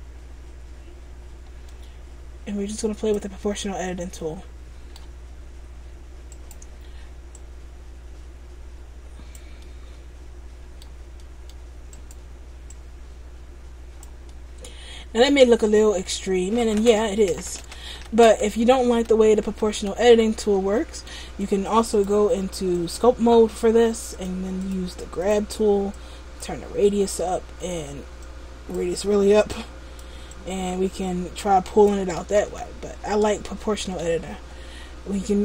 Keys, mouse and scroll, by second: 3.6 middle click, 6.4 right click, 7.5 click, 9.7 middle click, 11.3 middle click, 12.0 right click, 12.8 click, 14.4 middle click, 16.2 middle click, 17.7 ctrl+z, 18.1 ctrl+z, 18.4 ctrl+z, 18.8 ctrl+z, 19.1 ctrl+z, 19.6 ctrl+z, 19.9 ctrl+z, 20.2 ctrl+z, 20.8 middle click, 22.0 click, 24.4 click, 24.7 click, 26.0 click, 27.0 middle click, 28.3 click, 29.6 click, 30.4 click, 32.5 ctrl+z, 34.2 Tab.